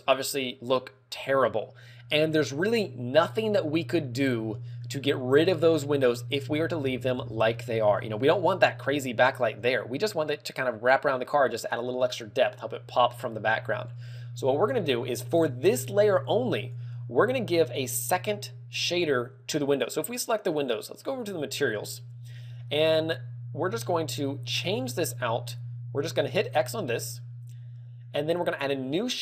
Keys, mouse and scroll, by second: 6.9-7.6 scroll up 11, 7.8 shift+middle click, 7.8 shift+middle click, 8.4-8.7 scroll up 3, 9.8 scroll up 1, 17.5 right click, 22.1 click, 26.8 click, 28.2 click, 29.1 click.